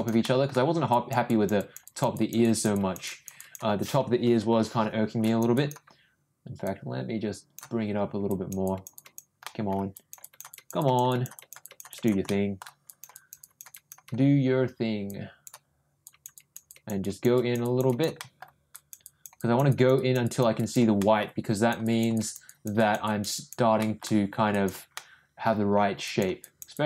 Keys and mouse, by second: 0.2 middle click, 0.9 click, 1.2 click, 1.6 click, 1.8 click, 2.1 click, 2.4 click, 2.7 click, 3.0 click, 3.3 click, 4.2 ], 4.4 ], 5.2 click, 5.5 click, 6.6 click, 8.3 click, 8.6 click, 8.9 click, 9.4 middle click, 9.9 click, 10.2 click, 10.5 click, 10.8 click, 11.1 click, 11.3 click, 11.6 click, 11.9 click, 12.2 middle click, 12.8 click, 13.1 click, 13.4 click, 13.7 click, 15.1 click, 16.0 click, 16.3 click, 16.6 click, 17.0 click, 17.3 click, 17.6 click, 17.8 click, 18.2 middle click, 18.7 click, 19.0 click, 19.3 click, 19.7 click, 19.9 click, 20.2 click, 20.5 click, 20.9 middle click, 21.5 click, 21.8 click, 22.1 click, 22.4 click, 22.8 click, 23.0 click, 23.3 click, 23.8 middle click, 24.5 click, 24.9 middle click, 26.0 click, 26.4 click, 26.7 click.